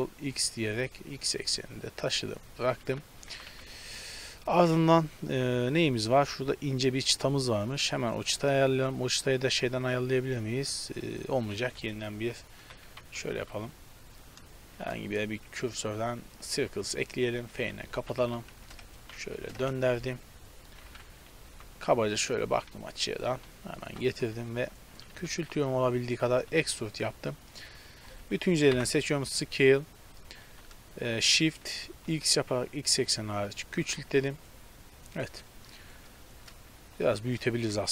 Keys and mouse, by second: 3.3 a, 3.5 a, 6.6 middle click, 8.7 z, 11.6-14.8 typing, 14.4 click, 17.2 s, 17.6 f, 18.0 r, 19.0 r, 20.7 z, 20.9 KP_7, 21.5 g, 23.4 z, 23.8 g, 25.2 s, 26.4 e, 28.8 ctrl+l, 30.4 s, 34.4-37.1 middle drag, 37.1 s.